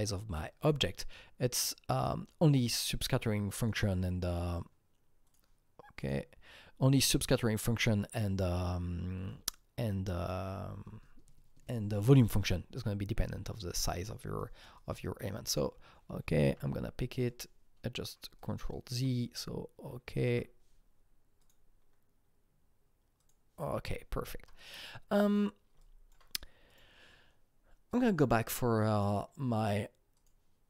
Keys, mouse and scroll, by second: 1.9 click, 3.6 click, 5.2 click, 5.9 click, 7.7 click, 9.3-12.6 alt+right drag, 9.6 click, 14.3 alt+Num_Lock, 14.3 alt+double right click, 14.3 click, 14.4 alt+right click, 14.8 alt+right click, 14.8 click, 15.5 click, 16.6 r, 17.3-21.4 drag, 18.4 alt+right click, 20.3 q, 21.4 alt+double right click, 22.5 click, 22.5 alt+double right click, 22.5 q, 23.2 click, 24.6 double click, 25.2 click, 25.8 alt+click, 26.7 alt+click, 27.9 alt+click, 29.0 click, 30.2 click.